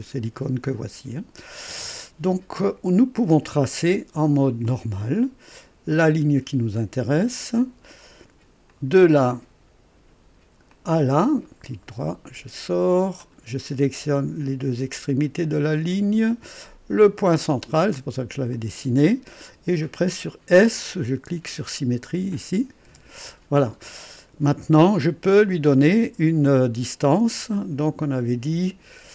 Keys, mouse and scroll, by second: 4.6 click, 5.9 click, 8.7 click, 10.7 click, 11.4 right click, 13.2 click, 15.9 click, 18.5 click, 22.9 s, 28.0 click.